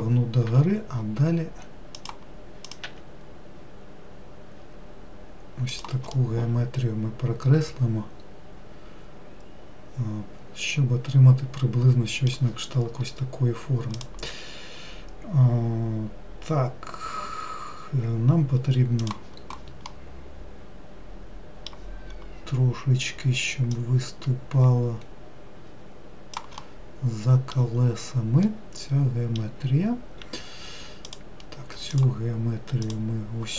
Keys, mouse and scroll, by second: 0.7 e, 2.9 click, 3.1 e, 6.4-9.4 middle drag, 20.1-22.3 middle drag, 22.3-24.0 scroll up 1, 24.0 click, 26.9-28.1 middle drag, 28.1-28.7 scroll down 1, 28.7-31.3 middle drag, 31.3 click, 32.2 shift+click, 33.1 shift+click.